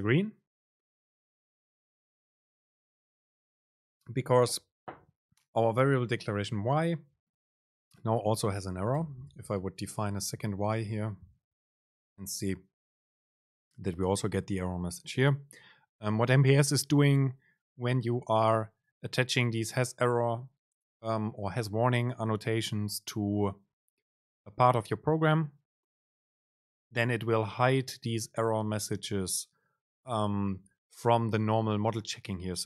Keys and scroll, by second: 9.1 Return, 11.0 BackSpace.